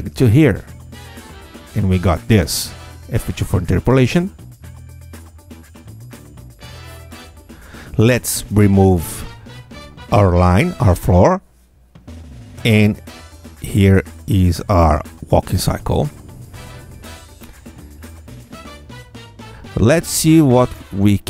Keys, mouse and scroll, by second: 0.4-2.2 alt+drag, 3.4 F2, 4.1 click, 4.9 Tab, 5.1 space, 8.1 space, 8.4-8.7 scroll down 1, 8.9 click, 9.3 Tab, 11.0 click, 12.1 Delete, 12.2 Tab, 13.0-13.6 scroll up 2, 13.9 click, 17.2 Tab, 17.7 space, 20.5 space.